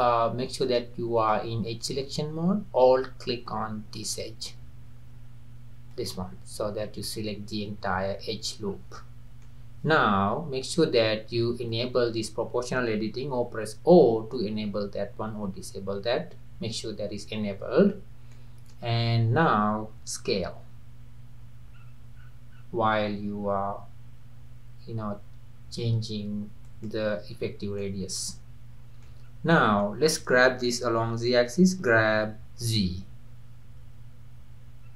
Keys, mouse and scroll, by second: 0.7 click, 1.2 click, 4.0 alt+click, 5.9 alt+click, 8.7-9.0 scroll down 2, 9.0-11.7 middle drag, 11.7 click, 13.7 o, 14.4 o, 16.8 o, 17.9-18.4 scroll up 2, 18.4-19.0 middle drag, 19.0-19.8 scroll down 2, 19.8-20.5 scroll down 1, 20.5 s, 21.3 click, 21.9 click, 23.5 click, 25.1-27.1 drag, 27.2 click, 27.4-27.8 scroll down 2, 27.9-29.3 middle drag, 29.3 scroll down 1, 29.5-31.8 middle drag, 31.8 g.